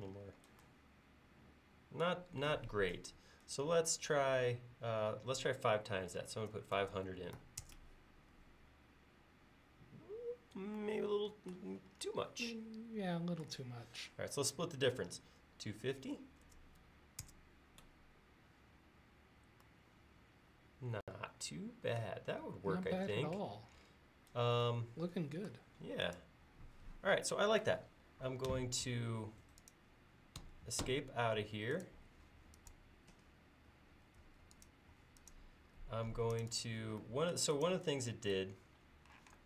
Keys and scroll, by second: 5.9-7.4 typing, 15.6-17.0 typing, 28.5 Escape, 30.4 Escape, 30.9 Escape, 34.2 space, 39.2 m.